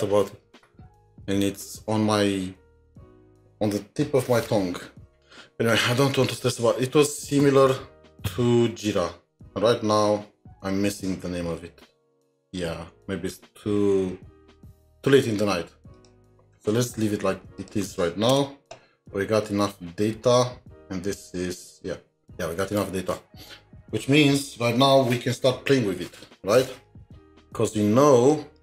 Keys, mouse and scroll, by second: 16.4 double click, 16.9 scroll down 2, 17.6 shift+click, 19.0-21.1 scroll up 2, 21.1 scroll up 3, 22.2 ctrl+s, 27.0 ctrl+s, 27.1-27.6 scroll up 4, 27.8-28.6 scroll up 8.